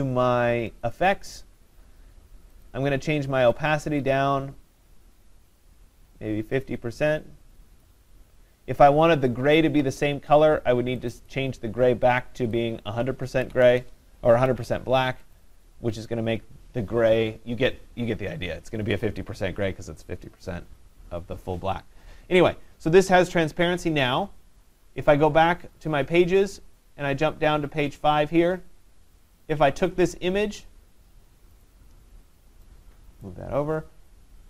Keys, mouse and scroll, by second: 1.0 click, 2.7 click, 8.8 click, 11.1 click, 11.3 click, 12.9 click, 13.5-14.3 typing, 14.7 Tab, 15.4 click, 19.5 click, 25.8 click, 27.9 click, 28.1 click, 29.6 click, 31.7 click, 33.6 click.